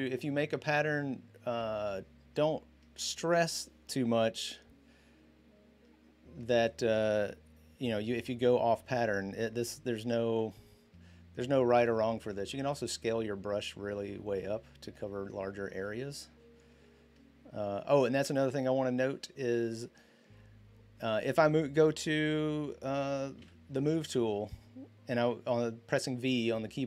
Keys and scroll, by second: 12.8-13.2 typing, 23.2 v.